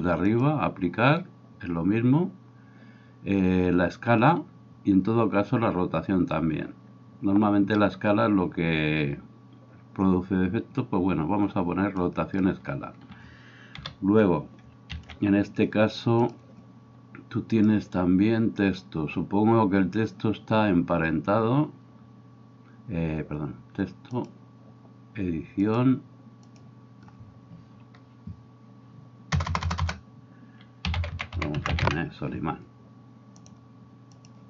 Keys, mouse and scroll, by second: 0.4-34.4 drag, 13.7 KP_7, 14.9 shift+s, 29.4 BackSpace, 29.8 BackSpace, 30.9-31.7 typing.